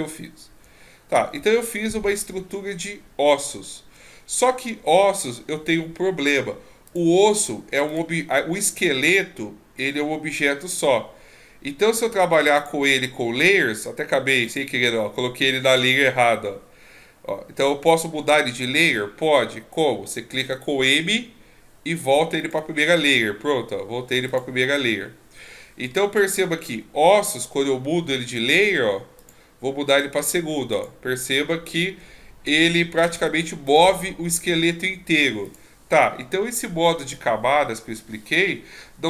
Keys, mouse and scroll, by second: 2.1-2.5 scroll up 3, 2.5-3.1 scroll down 2, 3.1 ctrl+scroll up 4, 3.7 ctrl+scroll down 1, 4.1 scroll up 2, 6.9 click, 12.5 click, 14.5 click, 15.6 click, 21.0 m, 24.3 click, 26.1-26.5 ctrl+scroll up 4, 26.5-27.4 ctrl+scroll down 2, 27.9 m, 30.7 click, 32.5 m, 35.5 click.